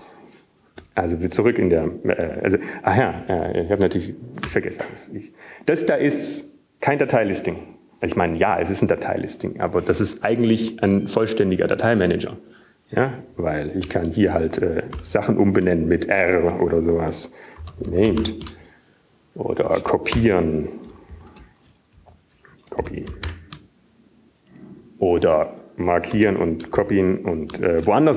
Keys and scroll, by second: 0.8 Return, 2.2 BackSpace, 6.8 Up, 17.0 Up, 17.4 Up, 18.1-19.1 typing, 20.7-21.2 typing, 24.4 typing, 25.5-26.9 typing.